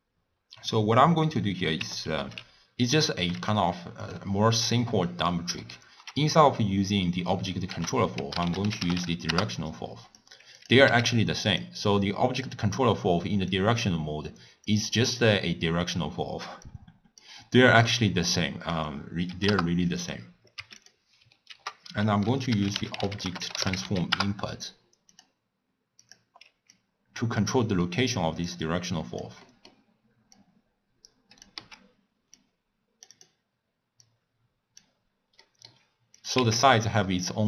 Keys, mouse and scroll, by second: 2.2 alt+s, 3.2 g, 4.7 click, 5.3-7.7 middle drag, 7.7 ctrl+a, 10.6 click, 10.9 w, 12.9-13.5 scroll up 5, 13.5 click, 14.7 click, 16.6-20.9 drag, 21.5 ctrl+a, 26.1 click, 26.7-27.9 drag, 27.9 middle click, 28.5 click, 29.5 middle click, 30.4 click, 31.9 x, 32.4 drag, 33.4 click, 34.1 drag, 35.4-36.2 middle drag, 36.2 click, 36.7 x, 36.9 click.